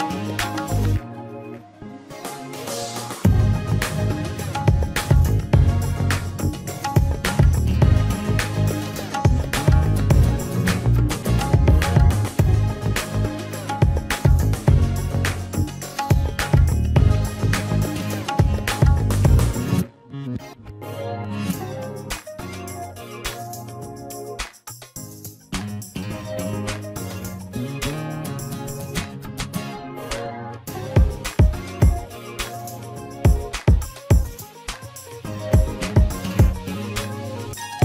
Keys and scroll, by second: 17.2 ctrl+z, 22.6 ctrl+z, 25.1 ctrl+z, 33.7 v.